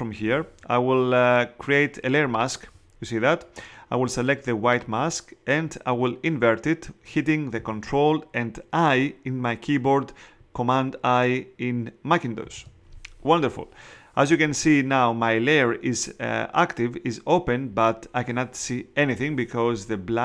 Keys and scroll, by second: 12.4 super+i.